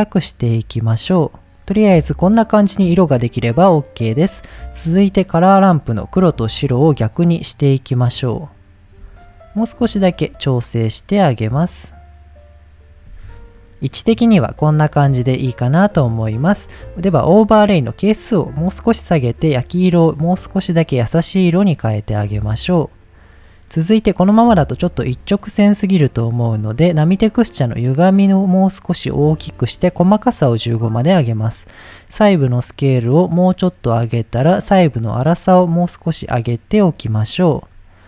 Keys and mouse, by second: 1.8-3.3 middle drag, 5.1-5.6 drag, 6.3-6.9 drag, 7.5-8.6 drag, 9.3-12.9 shift+drag, 13.7-14.4 middle drag, 14.8-15.4 middle drag, 15.9 middle click, 16.8 middle drag, 18.2-19.6 drag, 20.3-22.4 drag, 23.2 middle click, 27.5-29.4 drag, 29.7 click, 31.3-33.8 drag, 34.4-37.7 drag.